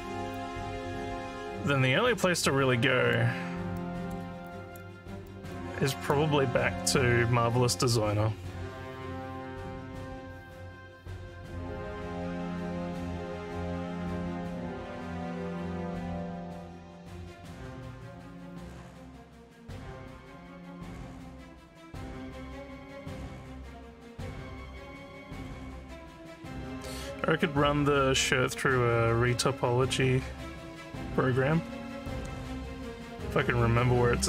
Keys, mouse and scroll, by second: 0.4-3.2 alt+drag, 3.8 alt+middle click, 4.5 alt+click, 5.3 alt+middle click, 5.9 alt+click.